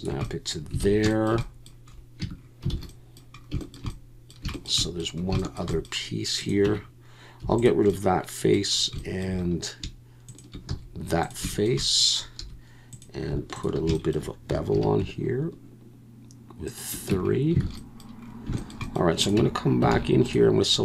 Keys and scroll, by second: 0.8 alt+a, 2.2 Tab, 2.7 alt+a, 6.6 Tab, 7.4 3, 10.7 x, 12.4 2, 14.7 ctrl+b, 17.1 Tab, 17.6 alt+a, 19.4 Tab, 19.9 alt+a.